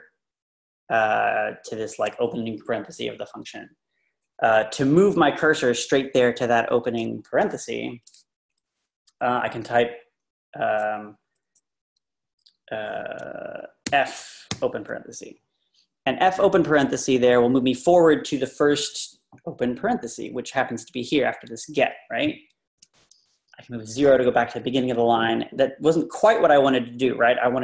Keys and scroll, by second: 13.9 f, 22.7 0.